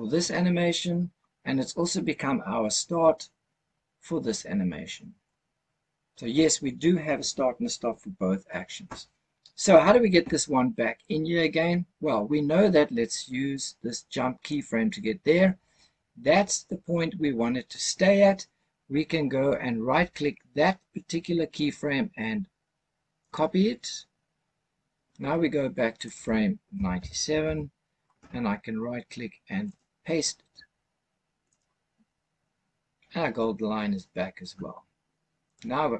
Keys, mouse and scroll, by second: 14.4 click, 21.5-23.2 right drag, 25.9-27.4 drag, 29.6-31.5 right drag, 35.4 click.